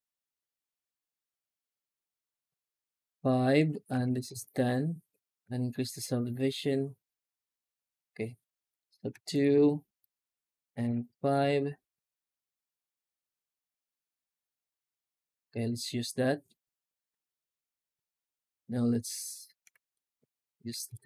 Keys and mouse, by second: 16.9 F9.